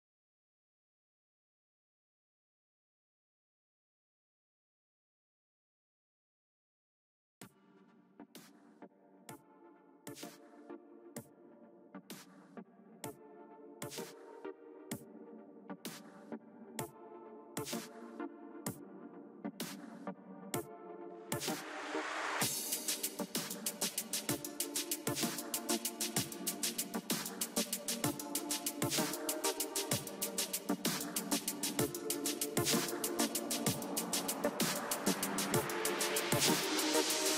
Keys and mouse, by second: 1.2 ctrl+z, 1.8-2.8 middle drag, 2.8-4.2 drag, 3.6 ctrl+z, 4.2 o, 4.9-6.0 drag, 5.6 ctrl+z, 6.1 click, 10.3 KP_3, 11.0-14.3 middle drag, 14.5 middle click, 14.7 middle click, 16.8 middle click, 17.8 KP_1, 19.3 KP_3, 20.5 a, 21.3 ctrl+s, 23.8 z, 24.5 b, 26.7 o, 27.6 g, 33.8 o, 34.2-36.0 right drag, 34.8-36.7 drag, 36.6 ctrl+s.